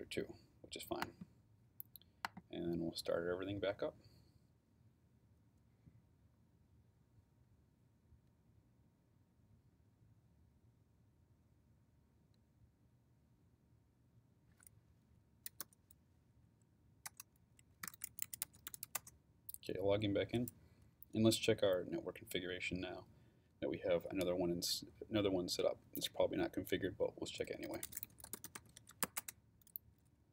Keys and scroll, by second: 15.2-16.1 typing, 17.1 Return, 17.6-19.3 typing, 27.4-29.5 typing.